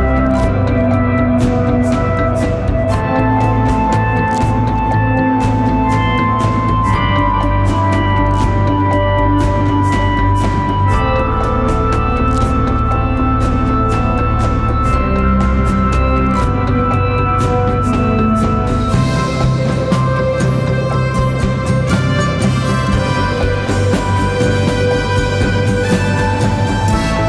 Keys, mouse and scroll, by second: 11.3-13.9 scroll down 1.